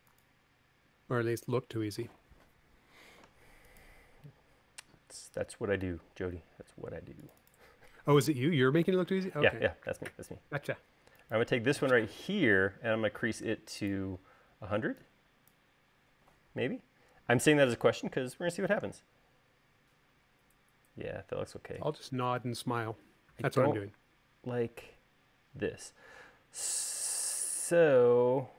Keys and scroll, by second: 9.5 u, 18.0 space, 18.5 u.